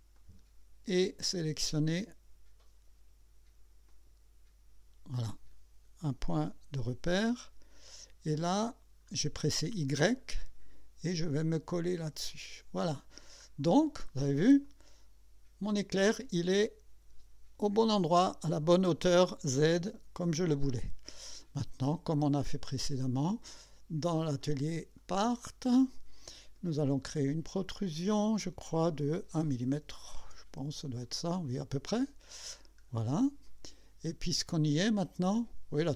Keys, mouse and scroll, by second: 0.2 click, 3.9 click, 7.1 y, 8.6 scroll up 2, 9.4 scroll up 2, 9.9 scroll down 2, 12.0 click, 12.8-13.5 scroll down 2, 14.6-16.1 drag, 21.8 click, 24.4 click, 25.0 click, 26.7 click, 29.9 KP_1, 30.2 Return, 31.0-32.4 drag, 32.6 scroll up 2, 33.2-34.6 drag, 34.8 scroll down 1, 35.0 scroll up 1, 35.3-35.9 drag.